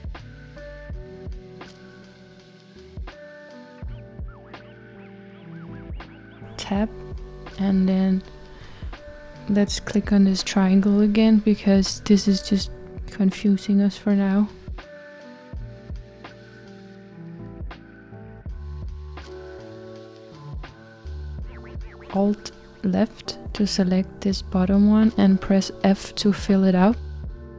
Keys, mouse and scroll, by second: 0.0-0.7 scroll down 2, 1.4-3.7 middle drag, 3.7 click, 4.6 Tab, 5.6 Tab, 7.5-10.8 scroll up 1, 11.7 click, 18.1-23.9 drag, 25.4-27.5 middle drag.